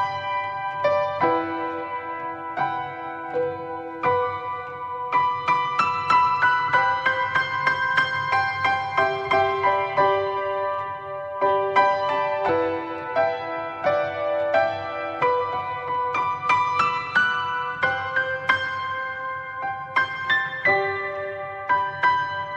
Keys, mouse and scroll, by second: 0.0-2.6 middle drag, 2.6 click, 3.2 click, 3.5 click, 4.1 click, 5.3 middle click, 6.0 Tab, 6.7 middle click, 7.4 a, 10.2-10.7 scroll up 2, 10.7-11.8 middle drag, 11.8 alt+s, 14.5 alt+s, 16.1-17.2 middle drag, 17.2 Tab, 18.5 click, 19.3-20.4 drag, 21.2 click.